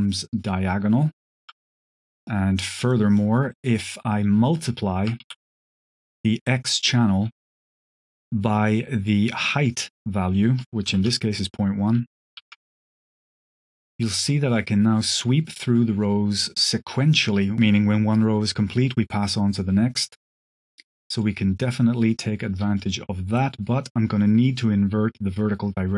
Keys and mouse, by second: 1.7 click, 2.2-2.8 drag, 3.0 click, 3.4 click, 6.3 click, 6.3 q, 7.3 click, 7.7 click, 8.0 click, 10.8 ctrl+c, 12.3 ctrl+v, 12.8 click, 13.7-19.8 shift+drag, 20.9 click, 22.4-25.9 shift+drag.